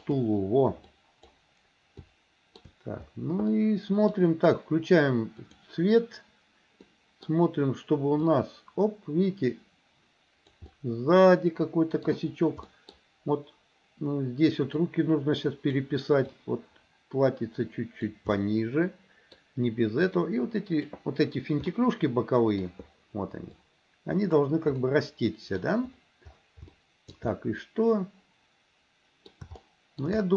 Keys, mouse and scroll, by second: 0.9 click, 2.1 shift+middle click, 3.6 middle click, 6.9 middle click, 8.4-10.6 drag, 10.7-12.1 middle drag, 12.7 middle click, 14.8-15.9 drag, 16.4-18.1 drag, 18.4-19.4 middle drag, 20.1 click, 21.7 middle click, 23.6 click, 24.9 middle click, 26.7 shift+middle click, 27.4-29.4 middle drag, 29.6 shift+middle click, 30.2 middle click.